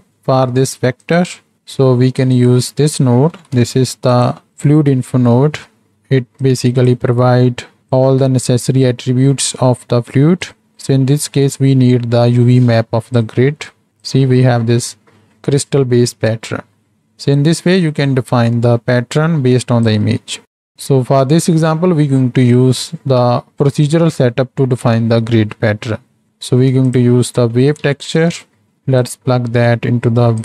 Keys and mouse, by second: 2.2 click, 3.4 shift+d, 4.9 alt+p, 5.9 middle click, 6.5 click, 7.4 middle click, 7.9-10.4 drag, 11.5-13.5 drag, 13.7 click, 16.7 middle click, 17.4 click, 18.0-20.3 drag, 20.7 Delete, 26.5 shift+a, 29.0-30.4 drag.